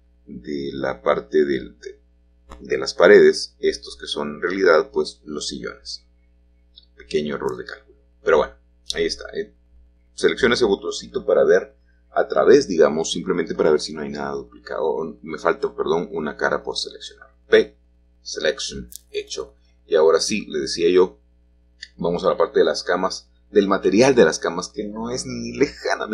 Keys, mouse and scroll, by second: 2.5-3.1 scroll down 1, 5.9 middle click, 7.7 click, 9.8 middle click, 10.0 middle click, 14.5-15.6 drag, 15.8 p, 17.5 click, 18.6-19.6 scroll down 1, 19.6 middle click, 19.9 click, 22.0 h.